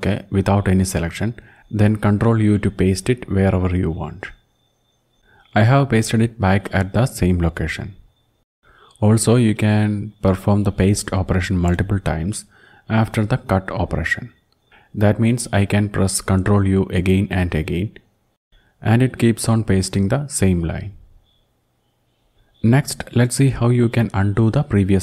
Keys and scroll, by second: 1.7 ctrl+u, 5.6 Up, 13.0 alt+6, 19.2 ctrl+u, 19.7 ctrl+u, 20.1 ctrl+u, 20.3 ctrl+u, 20.7 ctrl+u, 20.9 ctrl+u, 21.1 ctrl+u.